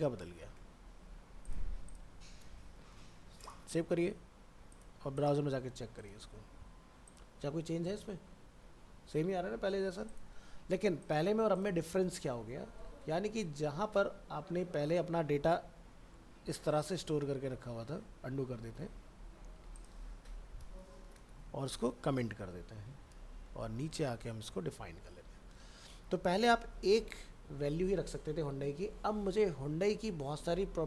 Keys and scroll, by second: 0.5 ctrl+c, 2.2 ctrl+a, 2.9 ctrl+s, 18.0 ctrl+z, 22.1 shift+Home, 23.4 ctrl+End, 24.1 ctrl+v.